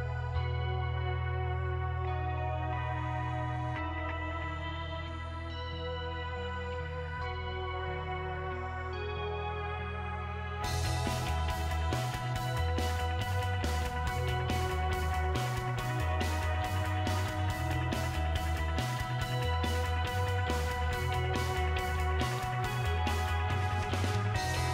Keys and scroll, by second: 1.4 BackSpace, 18.0-19.6 typing.